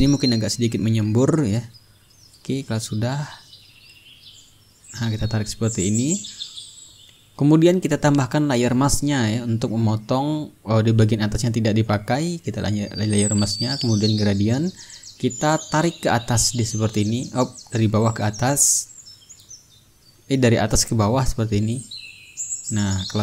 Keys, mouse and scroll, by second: 1.4 click, 2.4-4.8 drag, 5.0-8.0 drag, 9.2-11.2 ctrl+drag, 12.9 shift+click, 14.5 click, 15.6 ctrl+middle click, 16.3 ctrl+click, 16.4 ctrl+middle click, 17.1-23.2 drag.